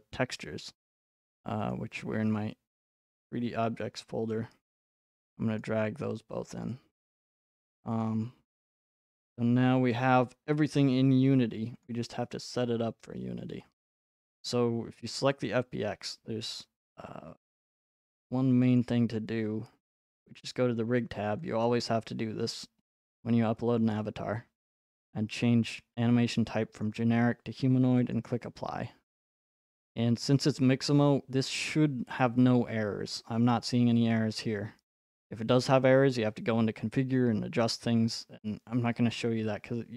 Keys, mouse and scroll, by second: 1.7 click, 3.1 click, 4.3 click, 8.0 click, 11.8 click, 18.8 click, 21.6 click, 26.8 click, 28.1 click.